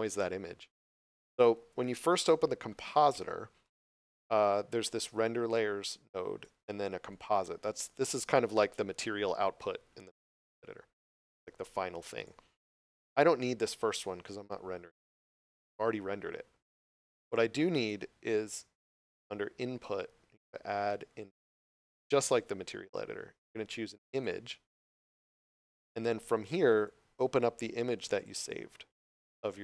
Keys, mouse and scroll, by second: 0.7 right click, 2.9-3.5 scroll up 1, 5.2 right click.